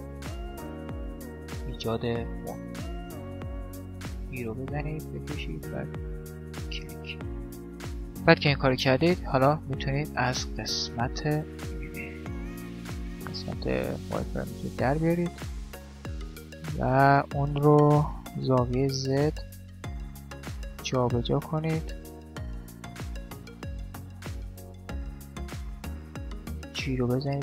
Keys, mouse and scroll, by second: 0.6 e, 2.6 e, 4.1 e, 8.8-12.4 middle drag, 12.0 z, 13.2-16.6 middle drag, 16.8-18.4 right drag, 17.2-18.6 drag, 18.0 g, 20.2-22.2 middle drag, 21.4 click, 22.0 z, 22.2 right click, 23.2 middle click, 23.6 click, 23.6 right click, 23.6 middle click, 23.8-24.8 drag, 23.8 right click, 24.5 z, 24.8-27.1 middle drag, 26.3 g.